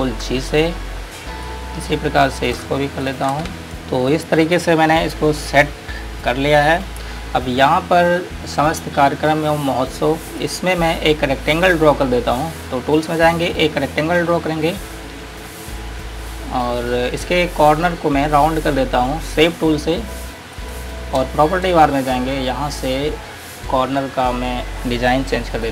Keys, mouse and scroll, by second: 0.7-1.6 scroll down 1, 1.6 click, 3.2 click, 3.7 click, 4.2-6.2 scroll up 1, 6.4-6.8 scroll down 1, 7.5 scroll up 1, 10.7 click, 13.7 click, 14.5 scroll up 1, 15.7 click, 21.5 space, 25.6 click.